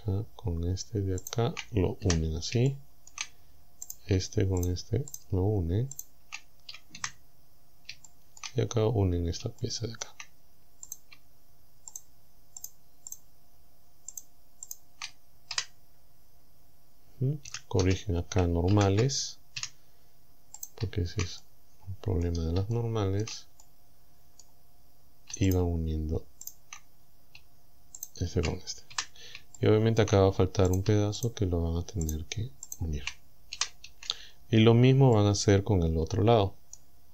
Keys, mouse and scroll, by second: 1.3 shift+right click, 2.1 f, 2.7 shift+middle click, 3.9 right click, 4.6 shift+right click, 5.2 shift+right click, 6.0 shift+right click, 7.0 f, 7.5 scroll up 2, 8.1 shift+middle click, 8.7-9.2 shift+scroll up 3, 9.5 shift+scroll down 2, 9.6 shift+scroll up 2, 9.8 shift+middle click, 10.9 right click, 12.0 shift+right click, 12.6 shift+right click, 13.2 shift+right click, 14.2 shift+right click, 14.7 shift+right click, 15.6 f, 16.1 scroll up 1, 16.6-16.9 scroll down 1, 17.5 a, 18.8 ctrl+n, 19.6 a, 20.6 shift+right click, 21.4-22.4 shift+middle drag, 22.8 shift+middle click, 23.6-24.6 shift+middle drag, 25.5 shift+right click, 26.5 shift+right click, 27.0 scroll down 2, 28.0 shift+right click, 29.0 f, 29.6 shift+middle click, 30.7 shift+right click, 31.2 shift+right click, 32.1 shift+right click, 32.7 shift+right click, 33.6 f, 33.9 a, 34.3-35.0 scroll down 4, 35.2-37.0 middle drag.